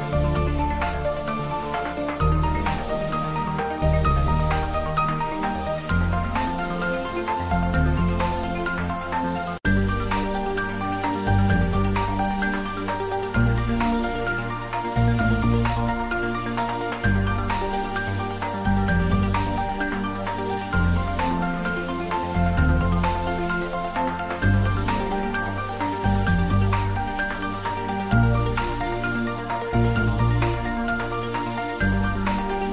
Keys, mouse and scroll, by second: 1.8 r, 3.8 click, 4.1 shift+z, 4.6 middle click, 5.7 click, 6.7 shift+middle click, 7.7 g, 9.0 click, 9.1 Tab, 10.2 a, 12.6 x, 14.2 click, 14.5 Tab, 15.2 g, 16.2 Right, 17.0 click, 17.3 middle click, 18.0 Tab, 18.1 middle click, 18.6 a, 21.1 click, 23.6 s, 24.9 click, 25.1 Tab, 25.5 s, 26.1 click, 26.6 r, 27.8 click, 28.1 Tab, 29.0 s, 29.4 click, 29.9 ctrl+z, 31.8 ctrl+z.